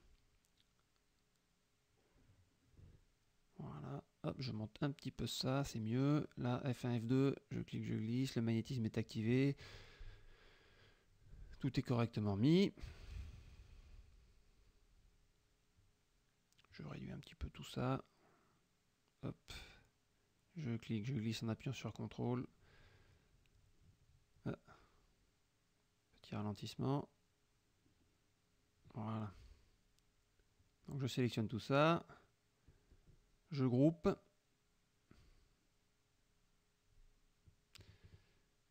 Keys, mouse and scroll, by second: 0.1 F2, 0.3 click, 2.5 F1, 2.6 click, 3.0 click, 3.2 F2, 4.0-6.5 drag, 6.8 ctrl+F1, 6.9 ctrl+click, 7.2 ctrl+F2, 7.9-10.0 drag, 11.8 F1, 11.9 click, 12.3 middle click, 12.4 click, 15.3 click, 15.8 shift+click, 17.3-20.4 ctrl+shift+drag, 21.0-24.5 drag, 24.5-25.0 scroll down 2, 25.2 click, 30.8 click, 31.3 shift+click, 32.4 ctrl+f, 33.5 ctrl+g.